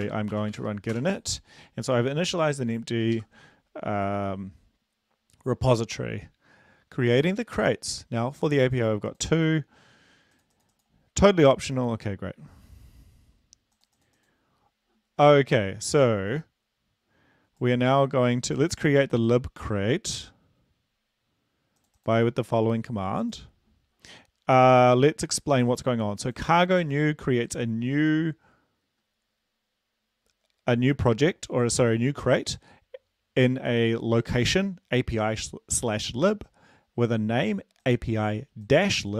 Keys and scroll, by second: 0.4-1.2 typing, 3.3 super+Left.